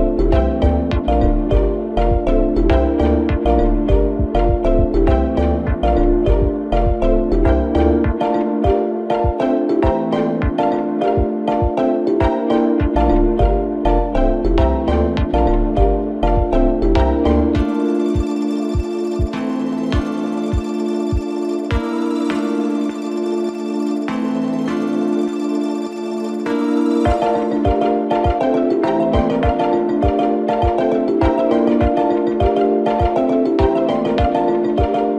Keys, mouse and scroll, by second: 3.7-5.9 shift+middle drag, 5.9 click, 7.8-10.7 drag, 10.7 n, 12.7-14.4 drag, 14.4-18.1 scroll up 4, 18.2-22.7 shift+middle drag, 23.8-35.1 drag.